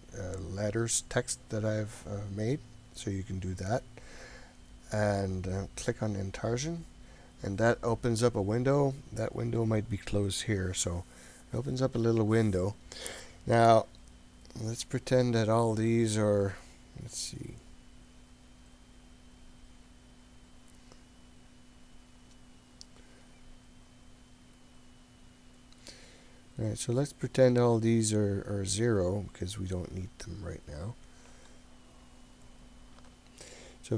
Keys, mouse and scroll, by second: 5.9 click, 9.4 click, 11.1 click, 15.0-17.1 drag, 17.2-21.5 drag, 22.9-25.3 drag, 27.1-29.2 drag, 29.3 click, 32.5-33.9 drag.